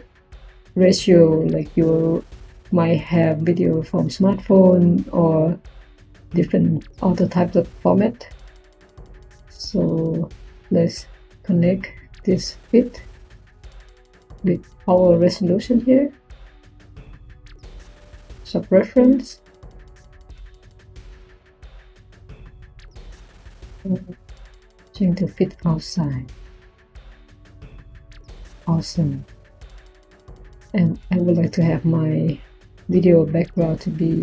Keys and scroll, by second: 32.5 Tab.